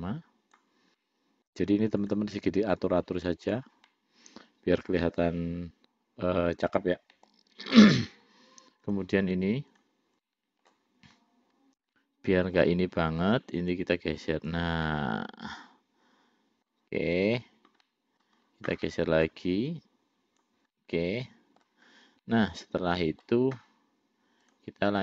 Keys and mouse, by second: 1.3 middle click, 2.3 click, 3.0 click, 4.2-7.6 middle drag, 9.1 click, 9.9 click, 10.5 middle click, 12.2 middle click, 13.6-14.8 drag, 15.2-17.0 middle drag, 18.1 middle click, 19.2 middle click, 19.9 click, 21.0 middle click, 22.5-23.6 middle drag, 24.7 click.